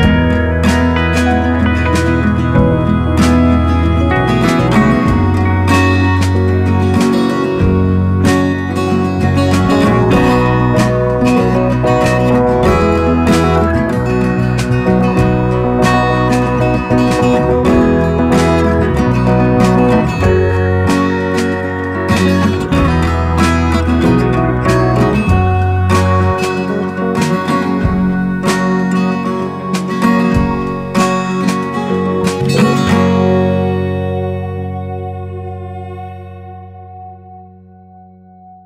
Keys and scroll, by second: 16.0 0, 16.5 [, 18.5 [, 21.2 alt+super+z, 21.7 alt+super+].